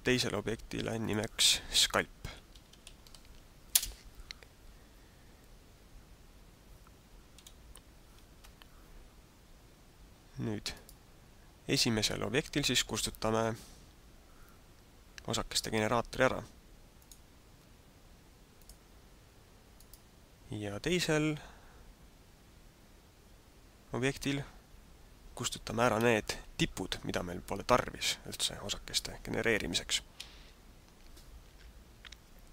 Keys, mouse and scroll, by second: 1.0 click, 7.5 g, 10.7 right click, 17.1 click, 18.6 click, 19.7 right click, 30.1 Tab.